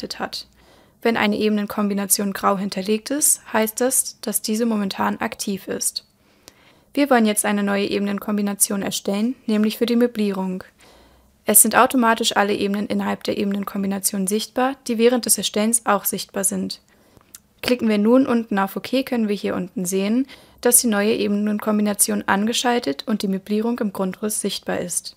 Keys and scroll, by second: 24.6 super+l.